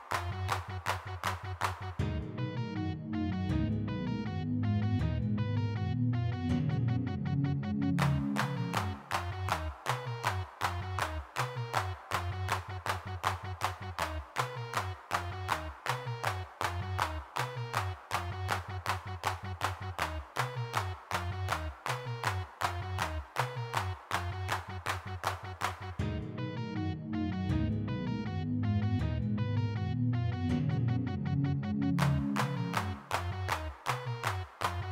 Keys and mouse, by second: 1.0 g, 1.0 f, 3.4 f, 3.5-4.7 drag, 7.3-10.6 drag, 10.6 3, 10.7 f, 11.0 click, 12.5-13.7 drag, 13.7 f, 13.9 click, 14.9-17.3 drag, 19.2 click, 19.7-22.4 middle drag, 23.0 middle click, 23.6-25.0 middle drag, 25.0 click, 25.5 middle click, 28.4 g, 28.4 f, 29.3 click, 29.9 middle click, 30.9 middle click, 31.3 click, 31.5 middle click, 31.7 click, 33.9 middle click, 34.6 click.